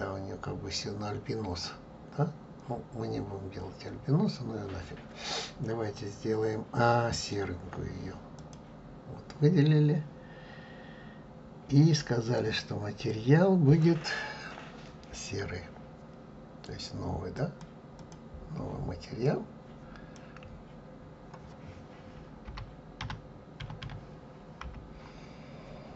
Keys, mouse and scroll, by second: 0.3-0.8 scroll down 2, 0.8-1.6 scroll up 2, 1.6-2.0 scroll up 1, 2.0-8.6 middle drag, 8.6 click, 17.5-25.9 drag.